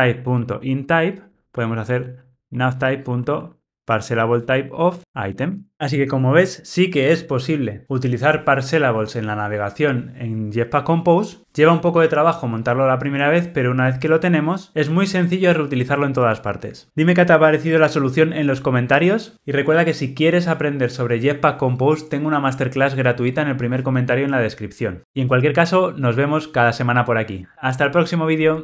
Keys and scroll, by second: 0.5 Return.